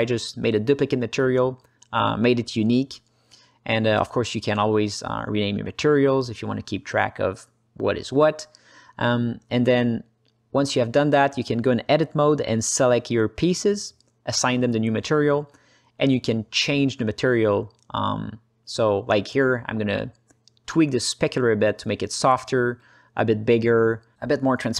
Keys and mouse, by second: 1.1 click, 3.5-6.8 drag, 7.5-9.5 shift+drag, 11.4 Tab, 12.8 l, 13.2 l, 14.3-16.7 drag, 16.7 Tab, 18.0 click, 18.7 alt+middle click, 19.5 click, 20.0 click, 20.2 h, 20.6 middle click, 21.1-22.6 drag, 23.0-24.5 drag.